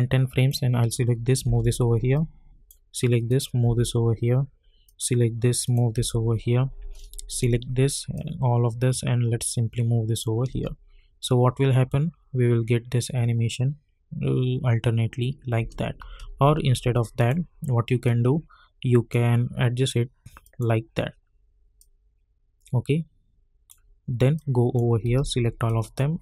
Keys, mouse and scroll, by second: 1.4 [, 2.1 click, 3.6 [, 4.8 click, 7.3-10.5 shift+drag, 10.5 space, 15.6 space, 16.2 ctrl+z, 17.2-25.1 drag, 25.1 ctrl+a, 25.7-26.2 drag.